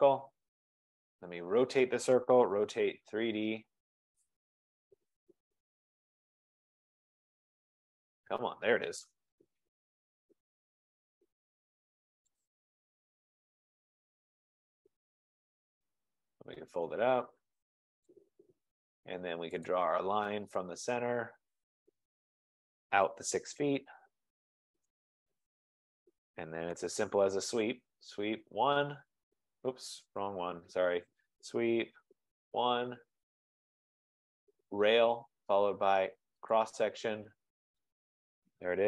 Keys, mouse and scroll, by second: 0.7 click, 1.3 click, 2.3-5.6 typing, 6.6 Down, 7.4 Down, 8.2 Down, 9.1 Return, 10.5 scroll, 10.6 middle click, 12.5 click, 14.0 click, 15.7 click, 16.4 middle click, 16.6 middle click, 16.8 middle click, 18.1 click, 19.8 click, 22.1 click, 23.3-24.8 typing, 25.1 Return, 26.8 Return, 27.3-28.9 typing, 30.3 Escape, 30.5 Escape, 31.2-34.9 typing, 33.3 Return, 34.9 click, 36.6 click, 37.9 click.